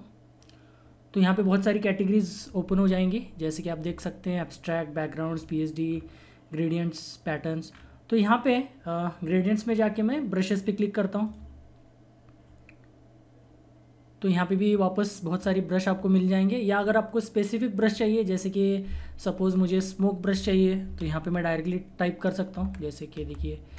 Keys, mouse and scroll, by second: 3.2 scroll down 1, 3.8 scroll up 1, 5.3 scroll down 1, 7.7 scroll up 1, 11.2 click, 15.3 scroll down 1, 19.8-22.7 drag, 22.6-23.7 typing.